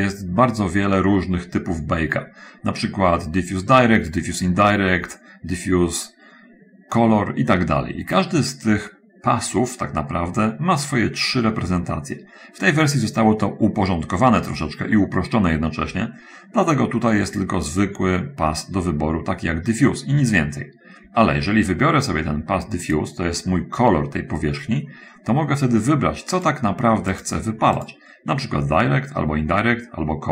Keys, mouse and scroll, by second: 17.7 click, 23.2 click, 26.7 click, 27.5 click, 28.2 click.